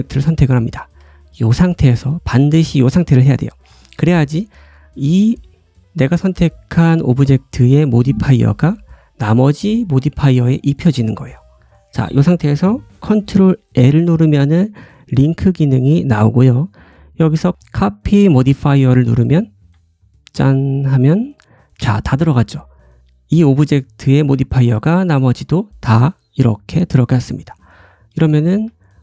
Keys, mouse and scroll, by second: 13.6 ctrl+l, 20.6 click, 21.2 click, 21.6 click, 22.0 click, 24.7 click, 25.1 middle click, 25.5 click, 26.7 click, 27.0 click, 27.3 middle click, 27.6-28.2 scroll down 2, 28.2 click, 28.4 g.